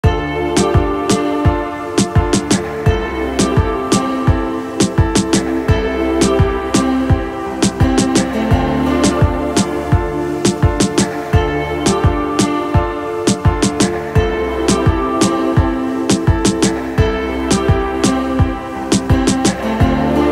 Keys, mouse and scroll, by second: 1.8 middle click, 3.0 middle click, 3.6 alt+a, 3.9 middle click, 6.9 middle click, 7.9 shift+middle click, 9.3 middle click, 10.1 shift+middle click, 10.8 middle click, 12.1-13.1 middle drag, 14.0 shift+middle click, 14.7 middle click, 15.7-17.1 shift+middle drag, 17.3 middle click, 19.4 middle click.